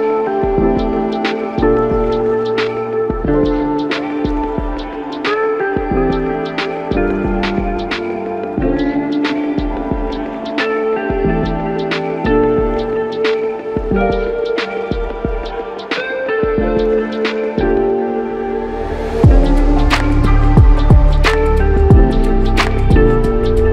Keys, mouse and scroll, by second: 5.3 Return.